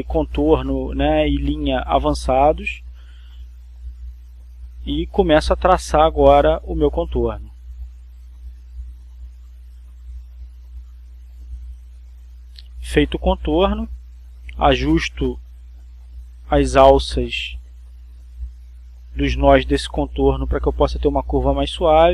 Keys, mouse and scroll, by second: 3.4-5.0 drag, 8.2 click, 9.2-11.4 drag, 11.7-14.9 drag, 15.4 click, 17.4 click, 19.2 click, 20.1-21.4 drag.